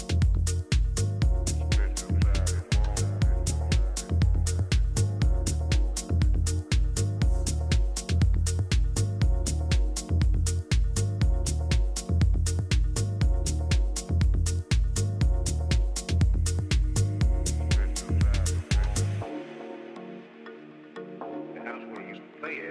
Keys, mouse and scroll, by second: 0.8 ctrl+z, 1.6-3.5 middle drag, 3.1 KP_3, 3.8 z, 4.5-7.0 middle drag, 5.2 a, 5.5 a, 9.5 b, 11.1 e, 16.7-18.4 middle drag, 17.5-19.4 drag, 18.0 a, 18.8 b, 20.7 g.